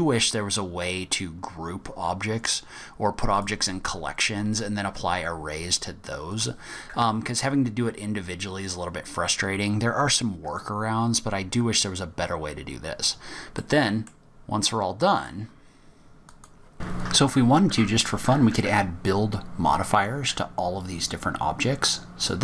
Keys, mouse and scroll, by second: 3.3 click, 6.3 click, 11.8-12.1 scroll down 2, 12.1 scroll up 1, 13.5 middle click, 14.2 scroll down 1, 14.5-14.9 scroll up 2, 15.1 click, 15.5-16.2 scroll down 1, 16.2 click, 16.2 scroll down 1, 17.0 click, 17.5 click, 21.7 click.